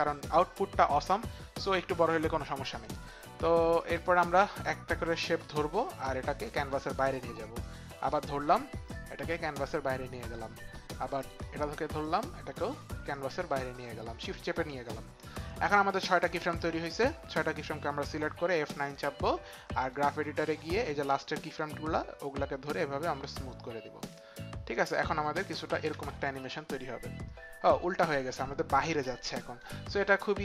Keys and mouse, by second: 4.5 click, 5.8 click, 7.6 click, 9.8 shift+click, 11.9 shift+click, 12.0 shift+click, 13.1 click, 16.3 click, 20.5 click, 21.0 click, 22.5 click, 24.9 click, 25.9 space, 27.6 click.